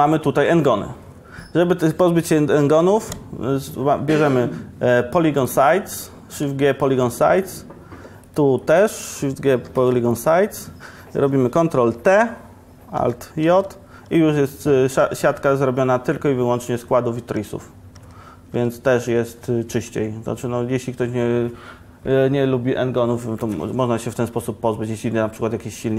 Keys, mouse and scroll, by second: 2.3 shift+g, 2.7 shift+g, 9.7 shift+g, 12.2 ctrl+t, 13.7 alt+j, 13.9 alt+j, 14.7 Tab, 15.3 Tab, 17.6 Tab, 18.2 Tab, 19.9 Tab.